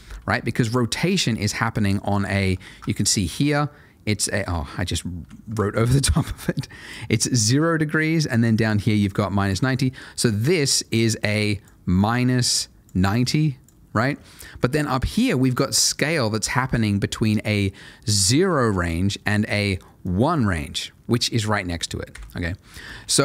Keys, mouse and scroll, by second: 0.6 click, 1.5 middle click, 1.9-2.5 scroll down 1, 2.7 ctrl+shift+a, 3.5 click, 5.2 Escape, 6.3 click, 16.5 ctrl+shift+a, 18.2 click, 22.1 Escape.